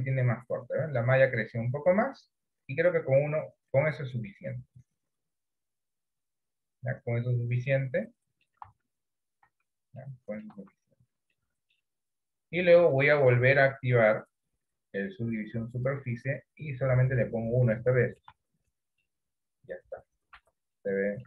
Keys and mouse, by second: 8.7 Tab, 9.6 Tab, 10.1 middle click, 10.9 Tab, 11.5 middle click, 13.1-16.0 drag, 17.9 middle click, 18.4 Tab, 19.1-20.5 middle drag, 20.9 middle click.